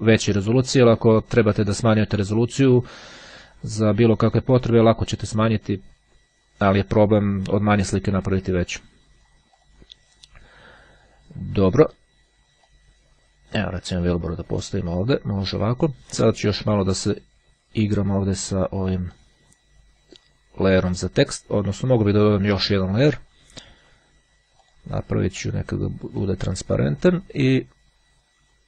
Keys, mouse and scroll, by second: 8.0-10.3 drag, 12.8-15.7 drag, 16.9 click, 19.0 click, 21.9 click, 24.5 click, 26.4 click.